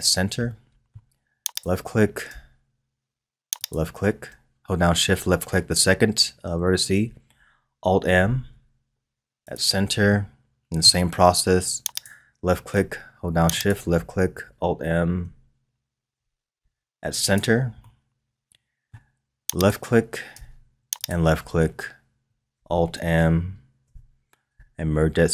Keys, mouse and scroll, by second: 0.5-1.5 middle drag, 1.5 click, 3.6 shift+click, 8.2 alt+m, 10.1-11.9 middle drag, 11.9 click, 13.5 shift+click, 16.1 alt+m, 17.8-19.5 middle drag, 19.5 click, 20.9 shift+click, 23.8 alt+m.